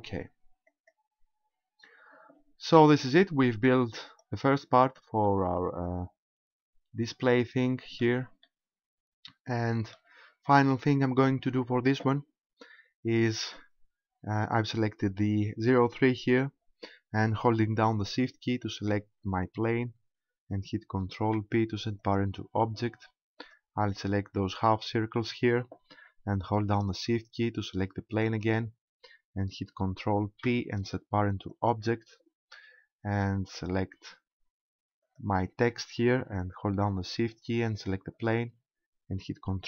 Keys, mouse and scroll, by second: 0.7 click, 3.6 click, 5.2 middle click, 8.5 middle click, 10.2-10.7 scroll up 3, 13.5 right click, 19.2 shift+right click, 21.2 ctrl+p, 23.4 right click, 28.2 shift+right click, 30.3 ctrl+p, 35.0 right click, 38.2 shift+right click.